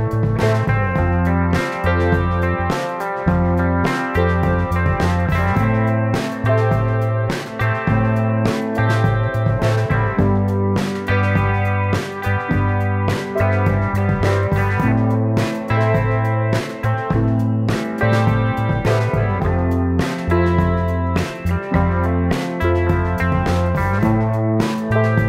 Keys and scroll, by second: 2.7 space, 14.6 super+z.